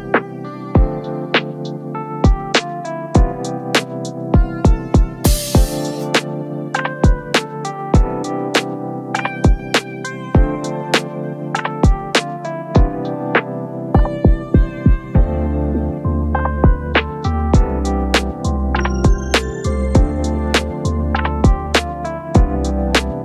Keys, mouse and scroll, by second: 4.3 2, 6.2 Return, 9.0 double click, 13.2 ctrl+v, 21.1 double click, 21.2 double click.